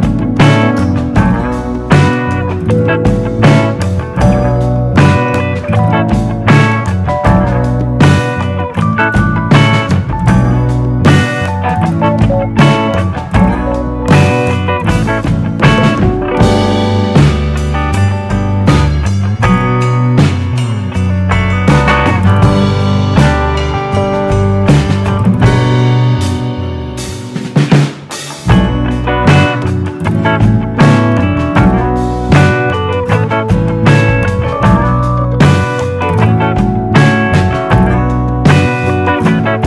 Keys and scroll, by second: 36.0 typing.